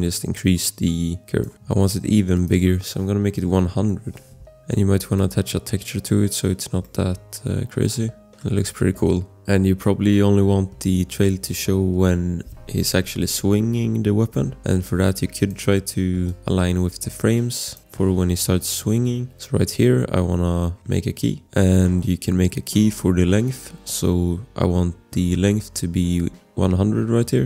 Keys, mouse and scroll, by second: 2.3 click, 3.1 1, 3.4 0, 3.7 Return, 5.2 click, 6.8 click, 8.4 click, 9.8 click, 10.1-10.6 scroll, 14.8 space, 15.4 click, 17.7 click, 18.0 shift+scroll, 19.1 click, 19.1 scroll, 19.3 click, 20.1-21.3 scroll, 21.3 click, 21.3 scroll, 24.2-24.6 scroll.